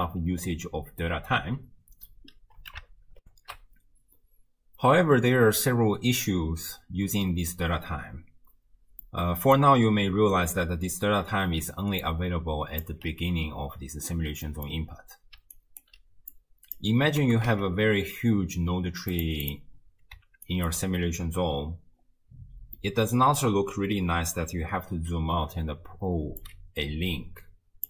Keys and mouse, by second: 3.3 ctrl+alt+shift+q, 9.1 click, 11.6 d, 12.1 right click, 12.9 d, 12.9 d, 13.0 d, 14.5 click, 14.5 right click, 15.4 d, 15.6 right click, 15.9 d, 16.4-16.8 right drag, 17.2 g, 19.4 click, 20.5 ctrl+click, 22.8 middle click, 26.5-27.8 drag.